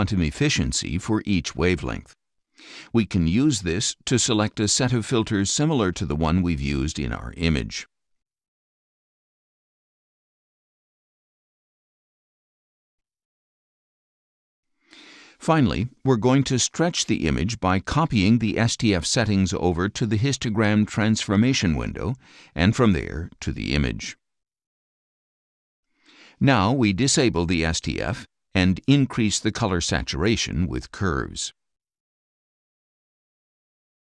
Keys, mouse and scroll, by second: 3.9-5.6 drag, 6.0-6.7 scroll down 4, 7.4 click, 8.7 shift+click, 9.1 shift+scroll down 2, 10.3 click, 11.0 shift+click, 15.5-18.6 drag, 19.4 click, 23.1-24.3 drag, 27.3 click, 29.4 click, 32.1 click.